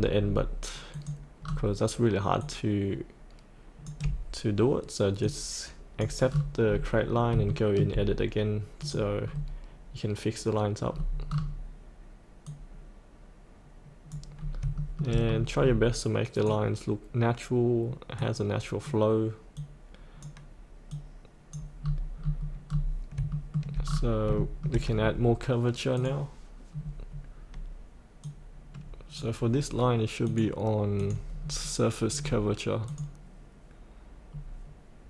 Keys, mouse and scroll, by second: 0.9 click, 1.4-1.8 scroll down 1, 2.4 click, 6.3-7.3 scroll up 1, 7.5 shift+middle click, 8.8 click, 9.2-12.4 scroll down 1, 12.4-14.1 drag, 14.3 scroll up 1, 14.8 shift+middle click, 15.2-15.8 scroll down 1, 16.3-21.7 drag, 21.7-22.8 scroll up 1, 23.3 shift+middle click, 23.9 scroll down 1, 24.3 shift+middle click, 25.9 click, 26.7 scroll down 1, 28.2 click, 31.4-32.8 scroll down 1, 32.8-35.0 drag.